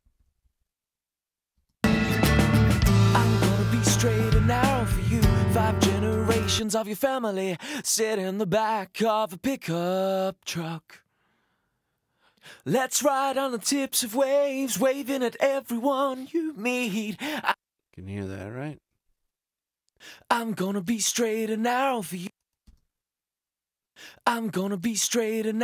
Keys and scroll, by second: 0.2 t, 1.5 space, 17.2 space.